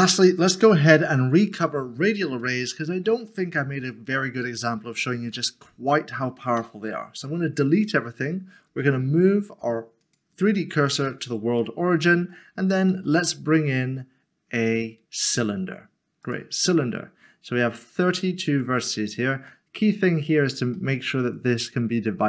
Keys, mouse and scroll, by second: 2.5 shift+middle click, 3.4 scroll down 1, 3.9 middle click, 5.2 typing, 8.7 typing, 10.0 click, 11.1 scroll up 1, 11.6 shift+middle click, 12.9 a, 16.2 click, 19.5 middle click, 20.3 scroll up 1, 20.7 middle click.